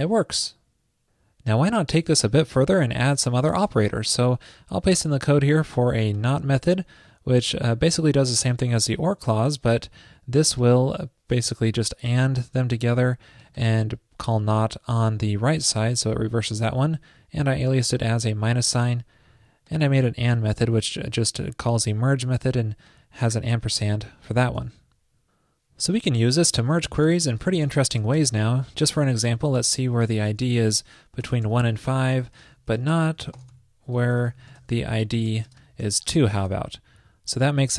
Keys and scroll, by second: 4.1 super+v, 24.6 super+s.